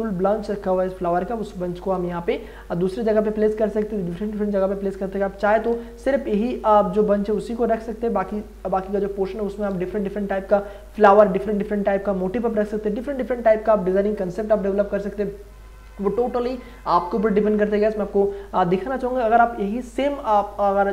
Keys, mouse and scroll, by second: 0.2 click, 5.4 v.